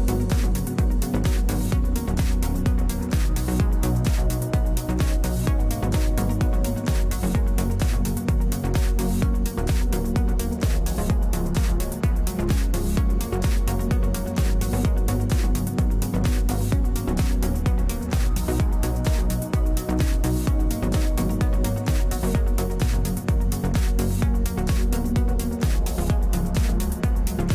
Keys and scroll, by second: 2.7 space, 3.6 space, 6.1 w.